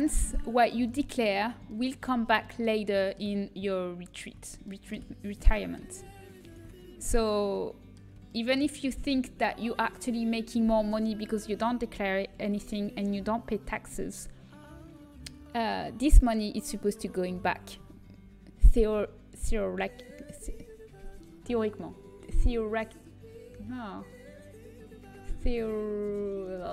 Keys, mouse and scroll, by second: 1.0-2.9 middle drag, 3.3 middle click, 3.9-5.9 right drag, 5.9-8.3 middle drag.